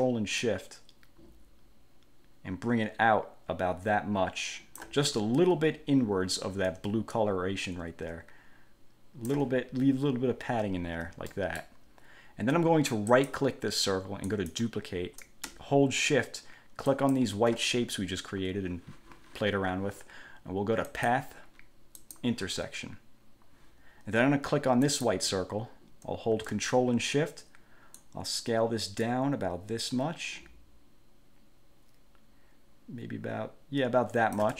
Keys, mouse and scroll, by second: 0.6-5.2 ctrl+shift+drag, 5.4 ctrl+shift+scroll up 2, 7.4-9.7 ctrl+shift+drag, 10.9 ctrl+scroll down 2, 11.5 ctrl+click, 13.3 click, 14.4 click, 17.1 shift+click, 21.1 click, 22.2 click, 25.0 click, 28.2-34.5 ctrl+shift+drag.